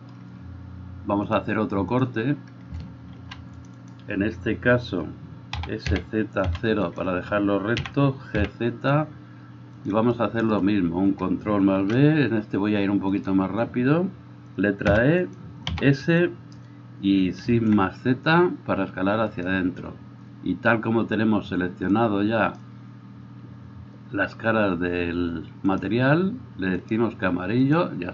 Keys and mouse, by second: 1.4-4.0 drag, 3.3 ctrl+r, 5.7 s, 7.9 g, 11.9 ctrl+b, 15.8 s, 22.1-27.1 drag, 27.1 middle click, 27.8-28.1 drag.